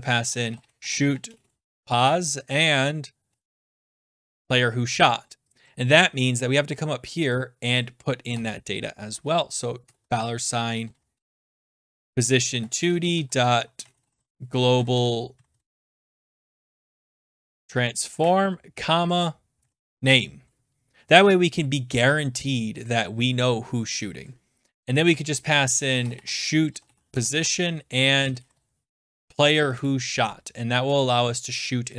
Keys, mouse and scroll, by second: 0.0-6.4 typing, 5.6 click, 5.9 scroll, 7.3 click, 8.3-20.3 typing, 8.6 middle click, 11.1 click, 17.4 Down, 17.6 Return, 22.1 click, 22.3-23.1 scroll down 5, 24.0 click, 25.3-29.0 typing, 26.7 middle click, 28.4 click, 29.7 Return, 31.0 click, 31.8 scroll.